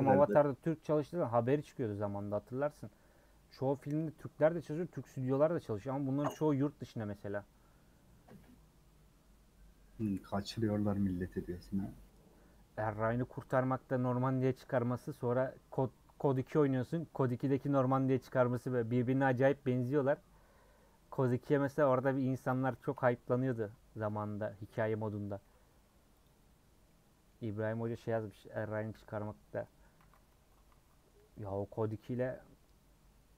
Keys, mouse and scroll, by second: 0.1 scroll down 1, 0.2-1.5 middle drag, 1.5 scroll down 1, 1.7 middle click, 2.1 scroll up 2, 22.7 middle click, 23.4 scroll up 1, 24.1 Tab, 24.5 a, 25.5 Tab, 26.1 click, 26.8 middle click, 27.5 scroll down 1, 28.9 /, 29.3 scroll down 2, 29.6 middle click, 30.4 Tab, 30.8 a, 30.9-33.3 middle drag.